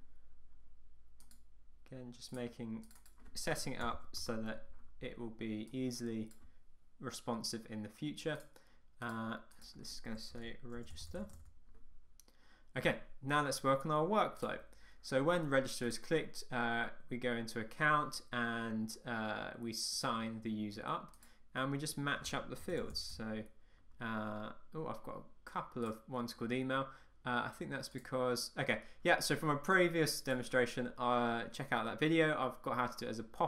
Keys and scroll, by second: 4.3 Return.